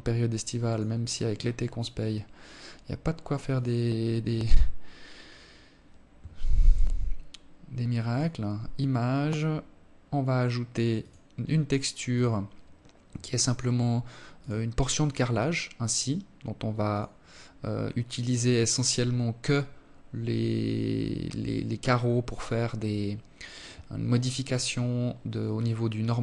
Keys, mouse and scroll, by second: 1.8 click, 2.7 click, 8.0-8.4 scroll down 3, 9.3 click, 15.5 click, 23.3-24.6 scroll down 4, 24.6-25.1 scroll up 3.